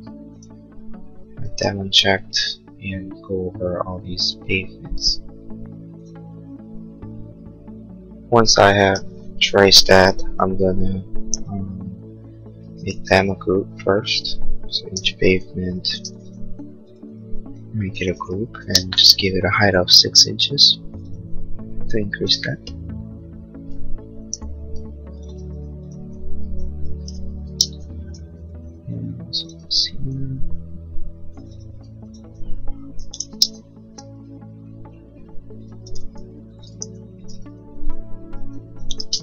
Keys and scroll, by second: 2.2 space, 11.4 p, 12.7 space, 15.2 g, 16.0 space, 16.5 p, 18.1 Return, 18.6 space, 19.2 Escape, 24.4 g, 25.5 p, 27.1 Return, 27.5 space, 27.9 Escape, 30.5 g, 31.9 p, 33.0 6, 33.1 Return, 33.7 Escape, 36.9 g, 37.5 p, 38.9 6, 39.0 space.